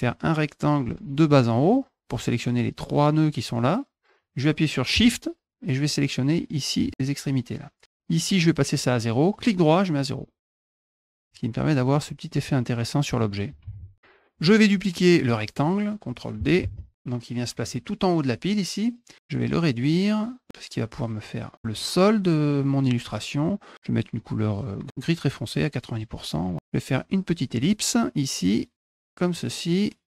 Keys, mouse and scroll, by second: 0.1-1.7 drag, 5.9 shift+click, 9.4 right click, 10.5 click, 11.1 click, 11.7 click, 12.3 click, 16.7 ctrl+d, 17.6 click, 19.9-21.5 drag, 26.5 click, 27.5 click, 28.6 click.